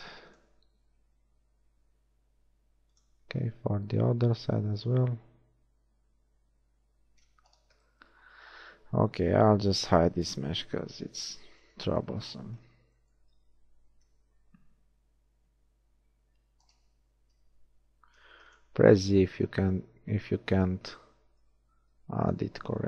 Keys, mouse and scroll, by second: 3.4 ctrl+r, 10.0 l, 11.0 h, 14.1 ctrl+r, 17.3 z, 18.2 ctrl+r, 22.0 ctrl+r.